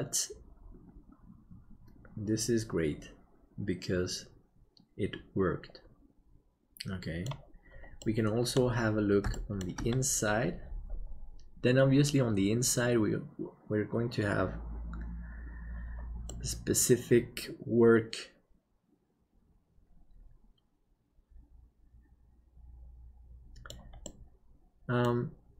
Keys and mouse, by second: 8.0 middle click, 9.3 shift+middle click, 16.2-23.7 middle drag, 24.0-25.0 middle drag.